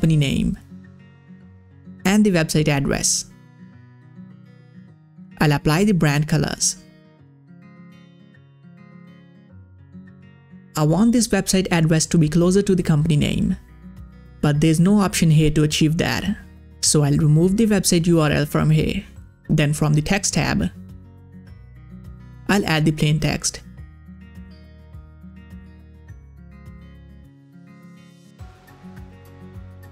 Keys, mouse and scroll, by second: 0.1-4.4 typing, 2.2 Return, 2.2 click, 5.4 click, 6.1 ctrl+v, 6.9 click, 8.9 ctrl+v, 9.5 click, 17.4 click, 17.4 click, 20.6 click, 20.7 click, 22.9-27.2 drag, 27.2-28.9 scroll up 1.